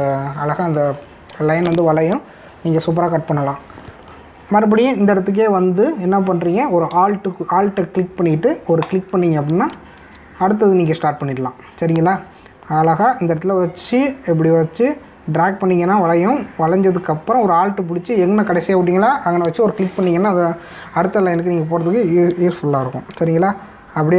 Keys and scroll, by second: 22.4 space.